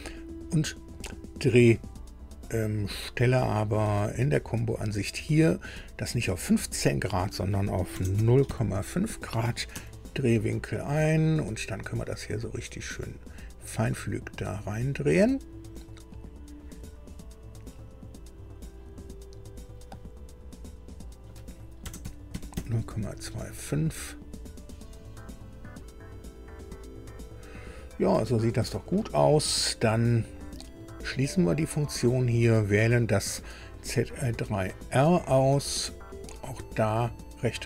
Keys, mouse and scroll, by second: 0.1 scroll up 1, 3.9 click, 5.7 click, 7.9 KP_0, 8.1 KP_Decimal, 8.5 KP_5, 9.7 Tab, 11.4-13.7 drag, 14.2-14.8 scroll up 4, 16.0 scroll up 2, 17.8-20.0 drag, 20.9 click, 21.8 KP_0, 22.0 KP_Decimal, 22.5 KP_2, 22.5 KP_5, 24.6-27.6 drag, 27.9-28.3 scroll down 1, 31.6 click, 33.7 click, 37.1 right click.